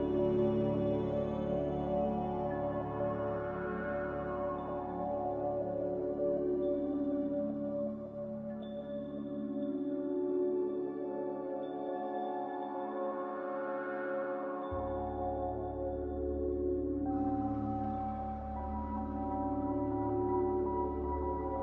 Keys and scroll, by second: 0.0 Delete, 6.0 g, 10.3 c, 17.9 a.